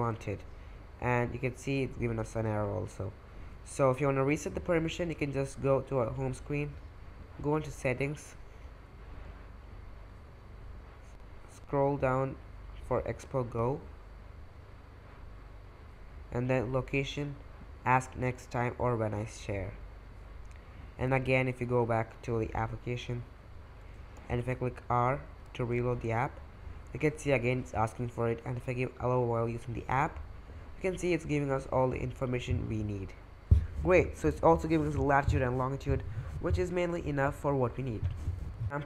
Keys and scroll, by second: 0.0 super+Tab, 2.2 super+Tab, 24.5 typing, 25.6 super+Tab.